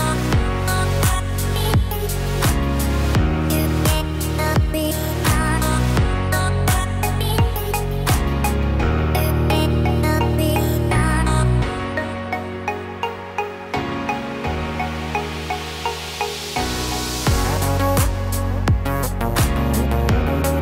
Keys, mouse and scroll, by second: 0.8 scroll down 1, 1.9 KP_1, 2.8-3.4 scroll down 1, 3.4 scroll down 1, 5.1 shift+right click, 6.3 shift+a, 13.5 click.